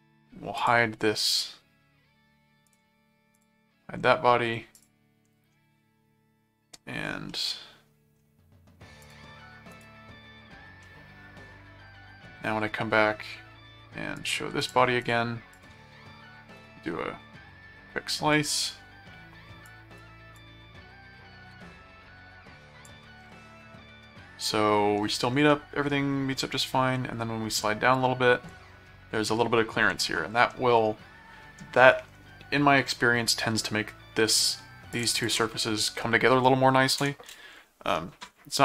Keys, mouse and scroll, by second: 0.6 click, 2.6 right click, 3.3 click, 4.7 click, 7.3 middle click, 9.0 click, 9.7 right click, 10.8-11.9 middle drag, 14.1 right click, 14.6-16.1 drag, 16.6 click, 18.3 click, 19.7 click, 20.3-22.9 drag, 23.7-25.0 middle drag, 25.1-26.4 middle drag, 27.9 click, 30.7 middle click, 34.9 ctrl+click, 37.9 middle click.